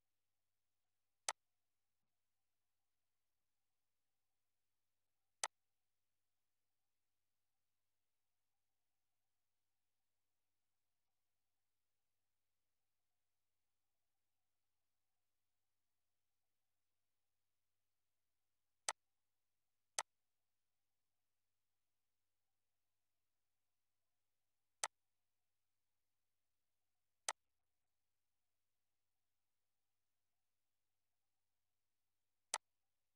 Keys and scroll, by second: 2.7 BackSpace, 3.0 2, 3.4 0, 25.8 Up.